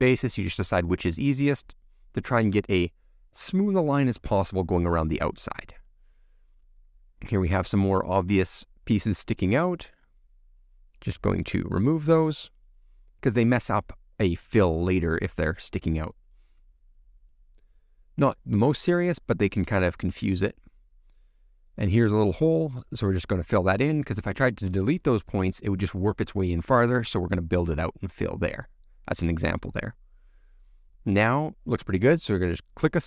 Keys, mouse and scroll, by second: 2.9-3.5 scroll down 1, 3.5 scroll down 1, 3.6-6.9 middle drag, 6.9 click, 8.6 shift+click, 15.1 x, 15.7-16.8 middle drag, 16.8-17.5 scroll up 1, 17.5 scroll up 1, 17.6-18.6 shift+middle drag, 18.6-19.1 scroll up 1, 19.1-21.9 middle drag, 21.9 click, 23.0 shift+click, 24.4 shift+click, 26.2 f, 26.8-27.6 scroll down 1, 27.6-30.1 middle drag, 30.1 click, 30.5-33.0 middle drag.